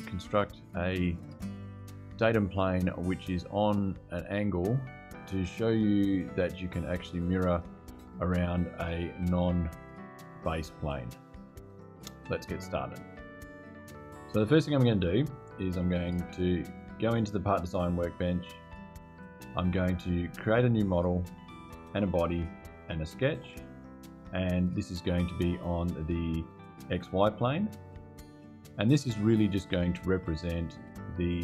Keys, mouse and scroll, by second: 16.6 click, 17.6 click, 20.7 click, 21.6 click, 22.9 click, 26.6 click, 27.3 click, 29.1 click, 30.6 click.